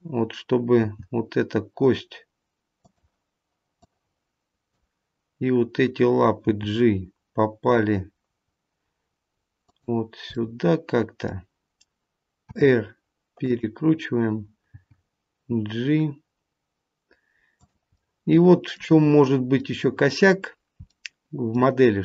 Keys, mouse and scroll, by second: 0.7 g, 3.7 click, 6.4 g, 10.3 middle click, 12.4 r, 14.7 g, 17.9 middle click, 19.0-19.4 scroll up 2, 19.6 middle click, 19.6 scroll up 2, 20.3-22.0 scroll down 2, 20.8 middle click.